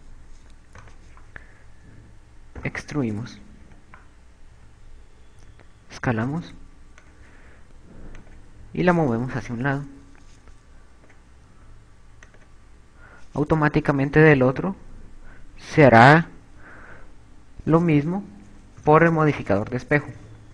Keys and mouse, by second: 0.2 click, 2.2 right click, 2.8 e, 6.5 s, 8.5 click, 9.8 click, 13.0 s, 13.3 click, 15.7 click, 18.0 KP_8, 19.2 KP_2, 20.4 KP_2.